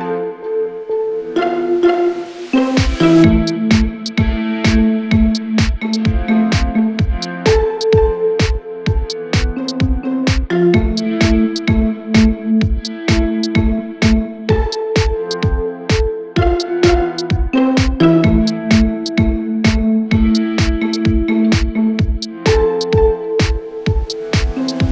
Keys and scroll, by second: 2.0 shift+Page_Down.